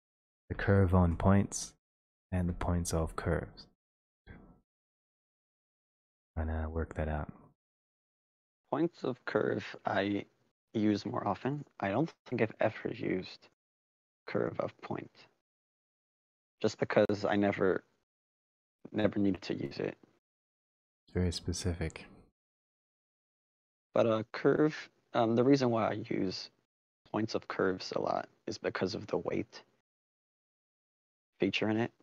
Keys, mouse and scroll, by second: 5.7 middle click, 5.7 middle click, 6.2 middle click, 6.4 middle click, 8.0-9.6 scroll, 12.3-12.9 scroll, 14.3 click, 18.5 click, 19.7-20.9 scroll, 21.1 click, 28.1 click, 28.9 click, 30.2 click, 31.1 click, 31.8 click.